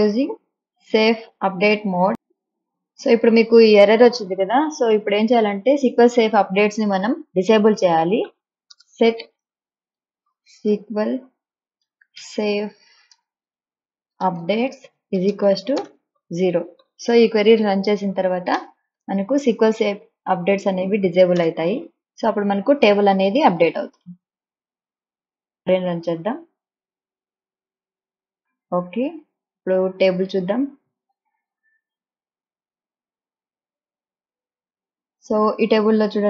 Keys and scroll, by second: 7.9-16.9 typing, 18.7 BackSpace, 19.1 ;, 21.5 BackSpace.